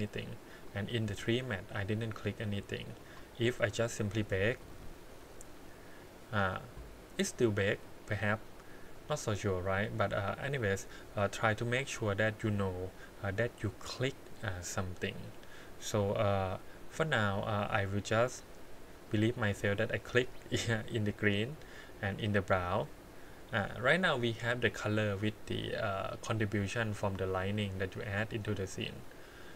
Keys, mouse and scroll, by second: 0.5 click, 1.6 click, 3.0 click, 3.8 click, 18.3 click, 19.0 click, 20.2 click, 21.5 click, 22.0 click, 23.4 click, 26.9-28.1 middle drag, 28.9 click.